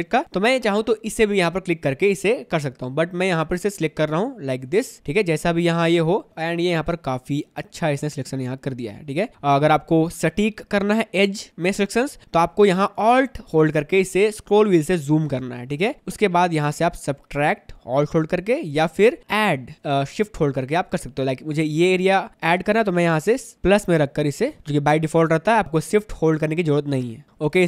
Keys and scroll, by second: 5.8 ctrl+z, 6.3 space, 14.9 space, 20.2 space, 26.0 ctrl+z.